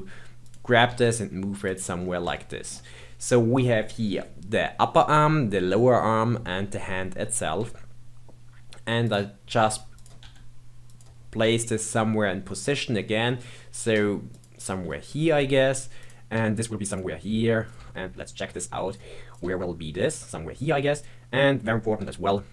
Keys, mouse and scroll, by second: 0.9 g, 1.9-2.3 scroll up 3, 2.3-5.3 shift+middle drag, 7.6 g, 9.6 g, 10.2 r, 11.4 g, 15.9 click, 16.3 g, 17.6 click, 17.7 g, 19.3 click, 19.4 g, 20.9 click, 22.0 KP_3.